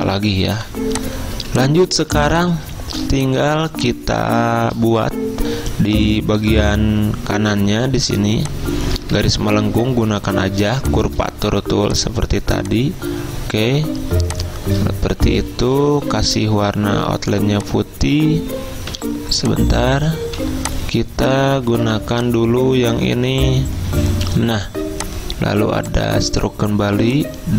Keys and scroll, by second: 0.6-1.9 typing, 11.1 `, 15.8 d, 16.9 x, 19.0 a, 20.3 ctrl+z, 21.7 `, 27.1 ~.